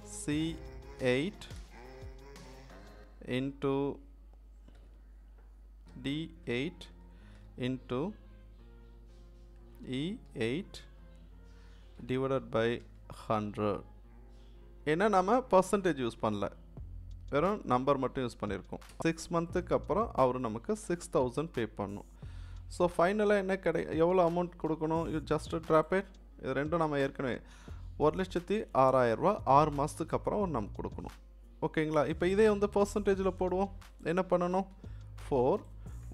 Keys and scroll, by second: 0.1 c, 1.0 7, 1.6 BackSpace, 2.1 8, 4.7 shift+8, 5.9 d, 6.5 8, 7.4 shift+8, 9.8 shift+e, 10.3 8, 11.9 /, 12.8 1, 13.1 0, 18.9 Return, 34.7 4.